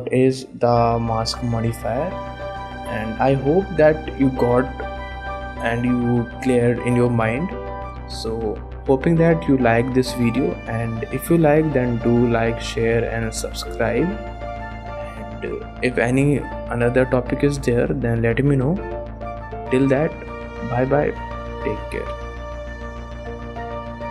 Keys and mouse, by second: 2.5 click, 3.2 shift+click.